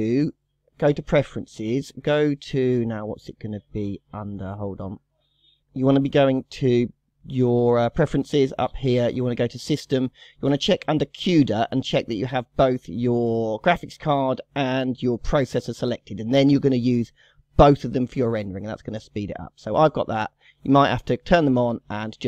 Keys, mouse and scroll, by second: 0.0-3.2 drag, 6.6-9.8 drag.